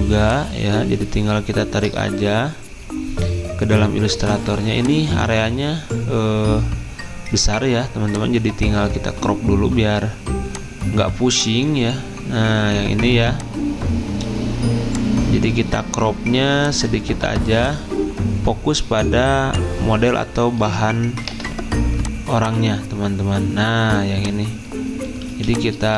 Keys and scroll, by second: 1.1 alt+Tab, 21.3 Return, 25.3 z.